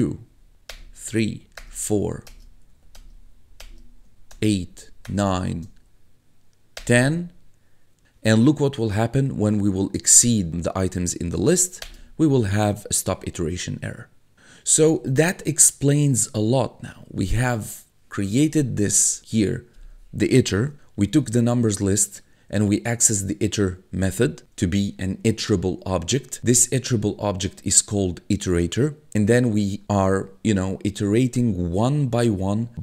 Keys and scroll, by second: 0.3 Up, 0.7 Return, 1.3 Up, 1.6 Return, 2.0 Up, 2.3 Return, 2.7 Up, 3.0 Return, 3.3 Up, 3.6 Return, 4.1 Up, 4.3 Return, 4.7 Up, 5.1 Return, 5.6 Up, 6.8 Return, 11.3 Up, 11.8 Return, 20.8 1.